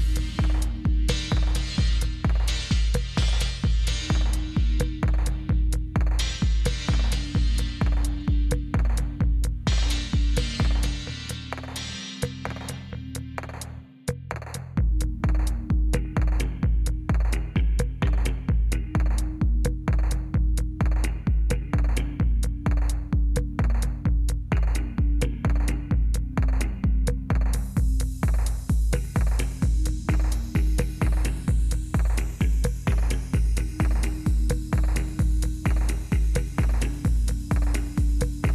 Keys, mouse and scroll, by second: 8.7 Up, 9.3 Down, 9.7 Down, 9.9 Down, 10.1 Down, 11.6 Return, 15.8 Down, 16.1 Down, 16.3 Down, 16.4 Down, 16.6 Down, 16.9 Down, 23.3 Return.